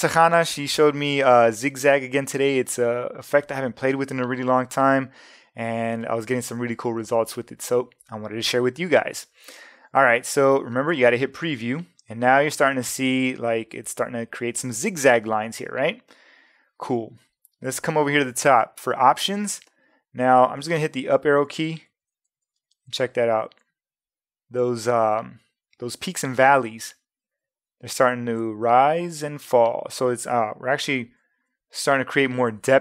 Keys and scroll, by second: 28.9 Up, 30.7 Up.